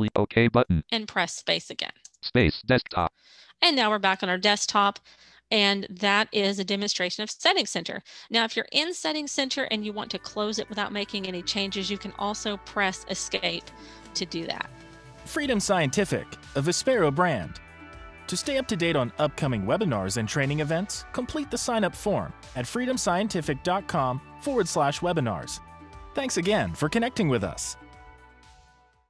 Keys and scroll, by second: 0.9 space.